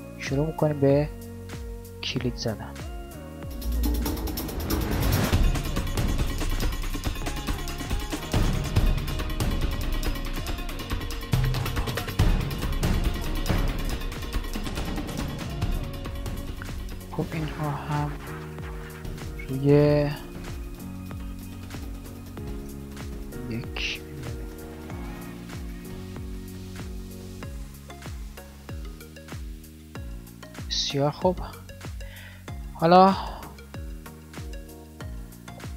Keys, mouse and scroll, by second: 2.9 g, 4.8 g, 5.9 KP_1, 8.4 g, 10.2 g, 11.6 g, 13.8 g, 18.0 n, 24.8 alt+a, 26.6 n, 30.0 alt+a, 30.8 shift+Left.